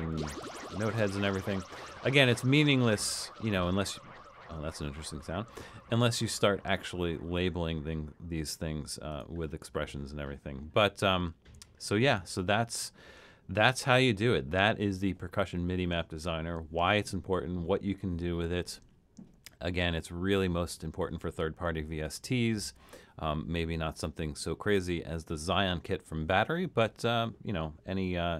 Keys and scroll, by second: 0.0-0.5 typing.